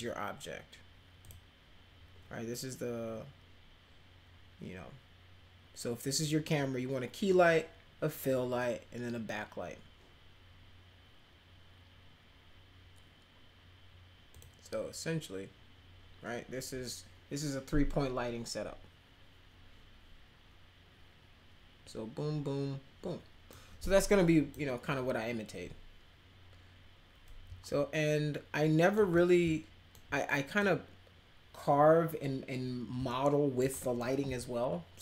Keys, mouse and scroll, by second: 1.2 click, 14.3 click, 23.5 click, 27.6-28.9 alt+middle drag, 29.1 middle click, 30.2 middle click, 33.1 alt+middle click, 33.7 middle click.